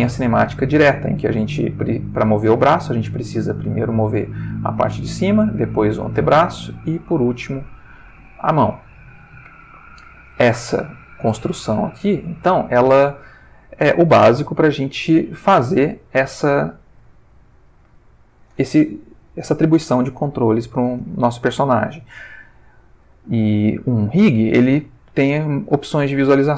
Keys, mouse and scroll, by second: 0.7 click, 1.3 click, 1.6 r, 2.6 click, 3.6 click, 4.2 r, 5.0 click, 5.4 click, 5.6 r, 6.2 click, 6.9 click, 7.1 r, 7.9 click, 8.3-8.9 shift+middle drag, 9.2 shift+click, 9.5 r, 10.2 ctrl+click, 11.0 ctrl+shift+middle click, 11.1 ctrl+shift+middle click, 11.9-14.1 shift+middle drag, 15.1 click, 15.8 ctrl+middle click, 17.2-18.6 ctrl+middle drag, 22.6-23.2 ctrl+middle drag, 25.2 shift+click.